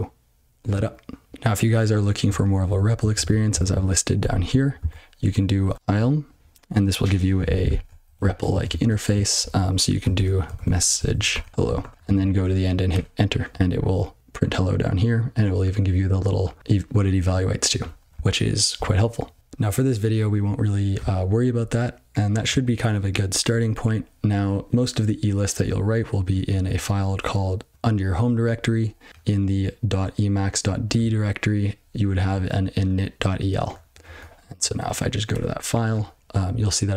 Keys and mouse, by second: 2.6 ctrl+p, 2.9 ctrl+n, 3.1 ctrl+n, 3.4 ctrl+space, 3.6 ctrl+n, 4.1 ctrl+g, 26.2 click, 26.5 click, 29.1 click, 30.9 click, 32.1 click, 32.7 click, 33.7 click, 33.9 click, 35.3 Return.